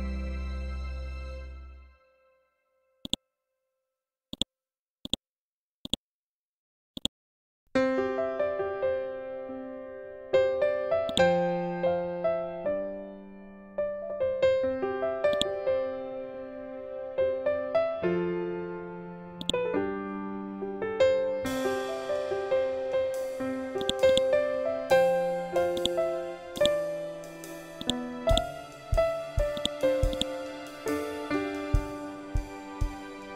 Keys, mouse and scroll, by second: 0.5-1.1 scroll down 1, 2.9-8.3 drag, 8.3-8.9 scroll up 1, 11.0-13.1 shift+drag, 13.1-13.8 scroll up 1, 15.2-18.8 drag, 19.3-23.5 drag, 23.7 click, 31.1 Right, 32.9 Down.